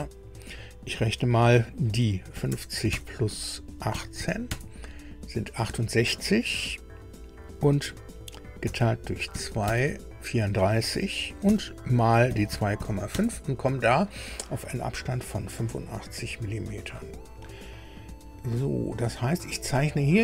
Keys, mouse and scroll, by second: 2.4 KP_5, 2.5 KP_0, 2.9 KP_Add, 3.9 KP_1, 4.2 KP_8, 4.5 KP_Enter, 8.6 KP_Divide, 9.3 KP_2, 9.7 KP_Enter, 11.5 KP_Multiply, 12.3 KP_2, 12.5 KP_Decimal, 12.8 KP_5, 13.1 KP_Enter, 17.0 click.